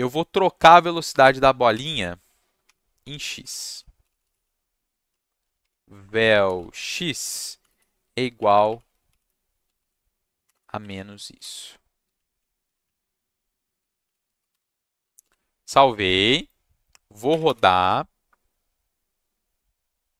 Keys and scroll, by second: 0.6-7.6 typing, 8.3 Left, 8.5 Left, 8.6 Left, 9.6 ctrl+c, 10.4 -, 10.5 space, 10.8 ctrl+v, 11.3 ., 11.3 /, 12.0 Left, 12.8 Left, 13.9 Left, 14.0 Left, 14.2 Right, 15.2 ctrl+shift+s, 17.3 Up, 17.4 Return.